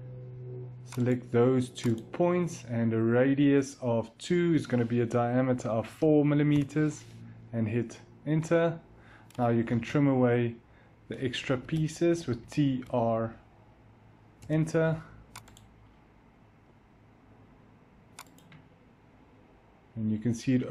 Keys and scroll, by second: 5.9 4, 6.4 Return, 9.0-10.0 typing, 11.4 Escape, 11.9-13.0 typing, 14.3 Return, 16.6-17.5 typing.